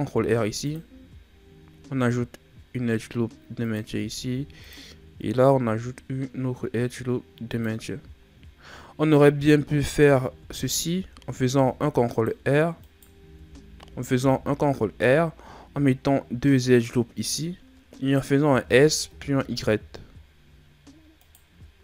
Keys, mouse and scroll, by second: 0.1 ctrl+r, 4.3 ctrl+r, 7.9-9.6 shift+scroll up 6, 9.6 ctrl+z, 10.0 ctrl+z, 11.5 ctrl+r, 13.2 ctrl+z, 14.2 ctrl+r, 18.4 s, 21.7 s.